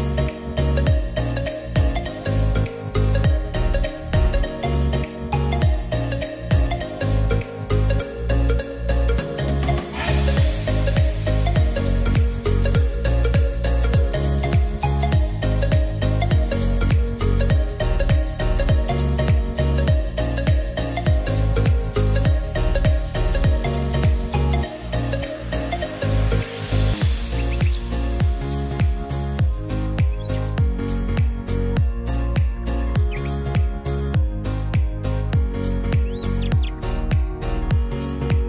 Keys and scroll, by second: 18.3-19.5 typing.